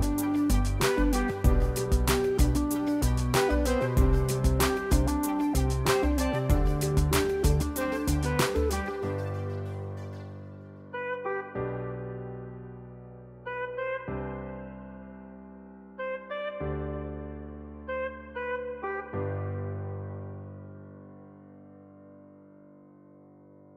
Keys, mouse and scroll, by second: 0.3 click, 1.8 click, 2.6 ctrl+d, 3.8 click, 4.2 click, 6.3 click, 8.3 click, 9.7 click, 10.2 click, 10.8 click, 12.8 click, 13.2 ctrl+z, 13.9 click, 16.9 click, 17.6 F2, 19.9 click, 20.7 F1, 21.0 click, 22.2 click.